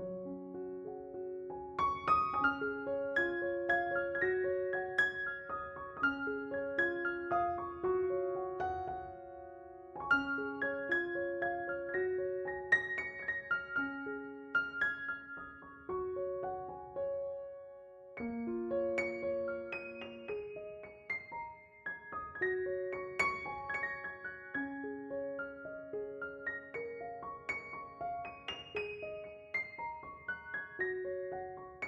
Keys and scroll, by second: 2.6 3, 9.6 s, 12.6 s, 14.0 alt+e, 19.4 s, 22.0 s.